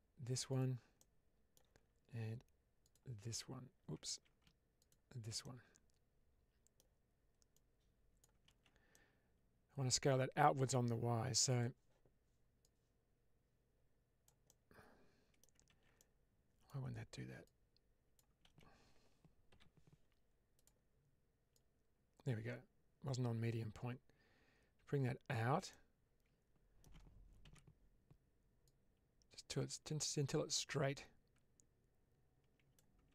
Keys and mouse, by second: 0.9 middle click, 2.7 shift+click, 4.0 ctrl+z, 5.3-6.6 middle drag, 7.4 click, 8.4 ctrl+z, 8.8-10.7 middle drag, 11.4 click, 12.5-14.1 drag, 14.3 middle click, 15.6 ctrl+z, 15.9 middle click, 17.3 click, 18.4 ctrl+z, 21.5-25.2 drag, 25.6-26.7 middle drag, 27.3 alt+z, 28.5-32.5 drag, 33.0 ctrl+z.